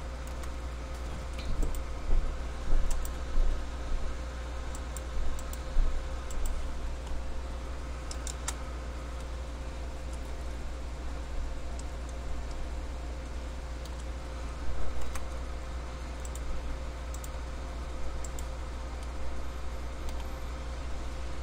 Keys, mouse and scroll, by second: 0.5 k, 9.4 middle click, 15.3 k, 19.2 middle click.